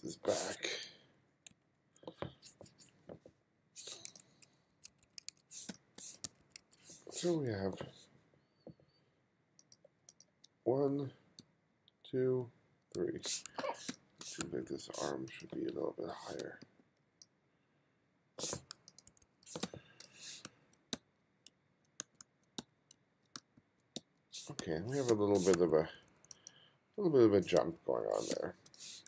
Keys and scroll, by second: 2.2 alt+Up, 5.7 space, 6.3 1, 7.6 f, 11.4 g, 12.5-15.2 typing, 16.4 b, 19.1-24.0 typing, 25.1 space, 25.6 2, 27.6-29.0 typing.